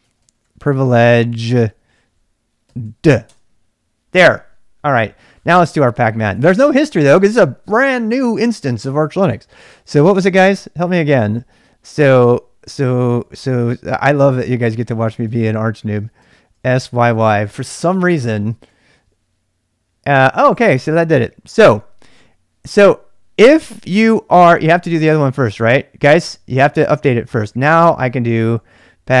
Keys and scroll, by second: 0.0-3.2 typing, 3.2 Return, 6.5 Up, 6.7 Up, 12.4-17.3 typing, 18.6 Return, 28.6-29.2 typing.